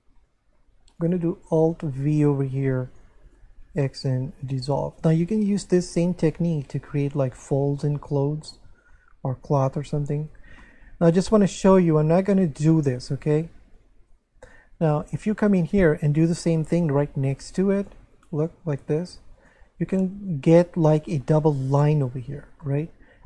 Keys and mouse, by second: 1.0 right click, 2.0 alt+v, 2.9 click, 3.2 shift+right click, 3.7 x, 4.3 click, 7.8 middle click, 9.8 middle click, 10.2 Tab, 10.6 middle click, 11.8 middle click, 12.3 Tab, 13.7 right click, 14.4 click, 15.7 right click, 17.0 alt+v, 17.8 click, 18.1 shift+right click, 19.1 x, 19.3 click, 20.9 middle click, 21.3 Tab, 22.4 Tab, 22.6 middle click.